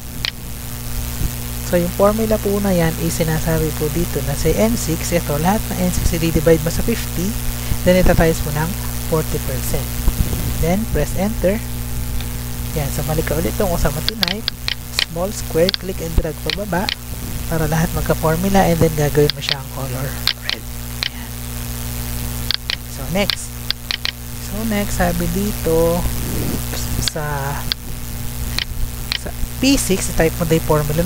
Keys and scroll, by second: 0.3 ctrl+c, 1.1 Tab, 1.5 F2, 2.1 ctrl+v, 12.1 Return, 29.6 ctrl+c, 30.9 Tab.